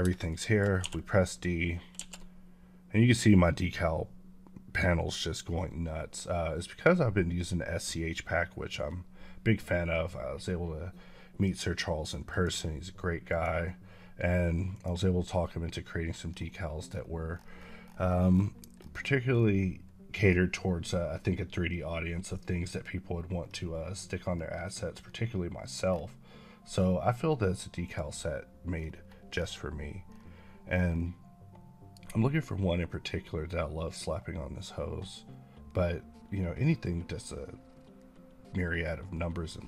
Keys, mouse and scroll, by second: 0.2 shift+middle click, 0.7 d, 12.2 click, 16.2 scroll up 1, 23.3-23.6 scroll up 11, 27.7 click.